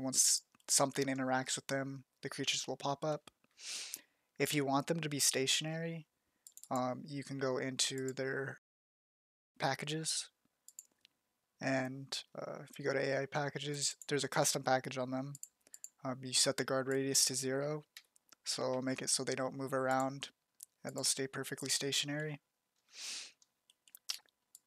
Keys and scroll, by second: 17.5 0.